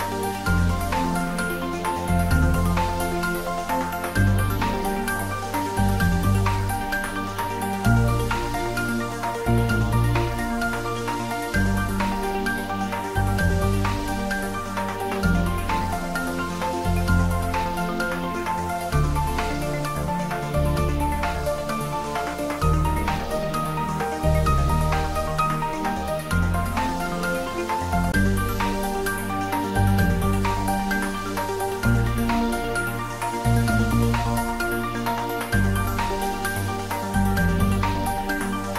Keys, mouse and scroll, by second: 0.7 click, 3.2-6.0 middle drag, 6.3 click, 7.8-10.1 scroll down 1, 10.4 click, 12.4-12.7 scroll up 1, 13.5-15.1 drag, 16.4 scroll up 1, 17.1-18.3 middle drag, 18.5-19.6 scroll down 1, 19.6 click, 20.8 ctrl+z, 21.6 click, 22.2-22.7 scroll up 1, 24.0 `, 24.4 3, 24.9-25.8 scroll down 1, 25.8 r, 29.1 click, 31.9 g, 35.0 click, 35.4 scroll up 1, 36.5 click.